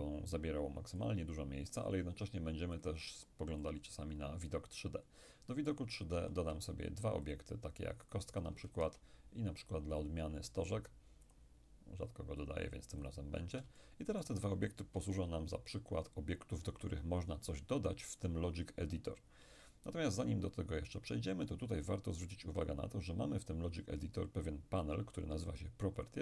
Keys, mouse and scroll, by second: 2.8-6.7 drag, 3.6-6.7 middle drag, 6.2 shift+a, 7.3-9.4 shift+drag, 8.7 shift+a, 11.3 click, 12.5-13.8 drag, 13.8-15.2 shift+middle drag, 15.2 shift+KP_1, 22.7-26.0 drag.